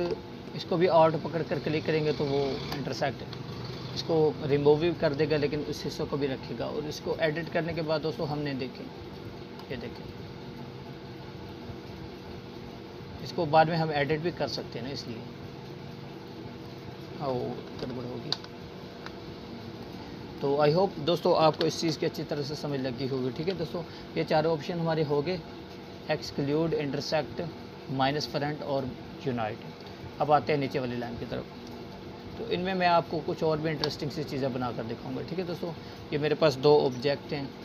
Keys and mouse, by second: 3.5-12.3 alt+drag, 18.3 ctrl+z, 20.6 click, 22.2 Delete, 23.3-24.0 click, 24.2 Delete, 30.9 click, 33.0-34.5 alt+shift+drag.